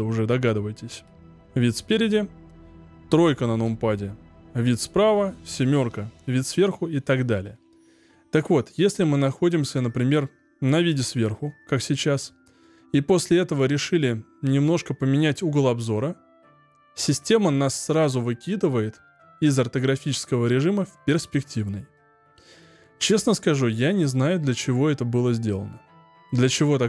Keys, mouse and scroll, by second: 0.9 KP_1, 3.6 KP_3, 5.7 KP_7, 15.6-18.0 middle drag, 18.0-18.7 scroll down 4, 18.7-20.5 scroll up 1, 20.5-21.7 scroll up 1, 21.9-24.9 middle drag.